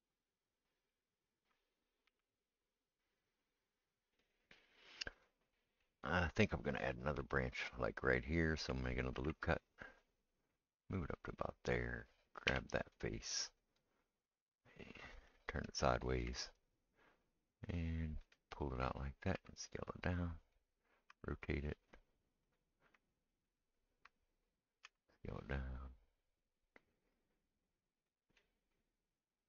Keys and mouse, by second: 0.9 ctrl+right click, 2.1 s, 5.2 click, 5.2-12.7 middle drag, 9.1 ctrl+r, 12.5 3, 12.7 click, 12.8-29.4 middle drag, 19.3 s, 21.1 r, 23.6 right click, 24.8 s.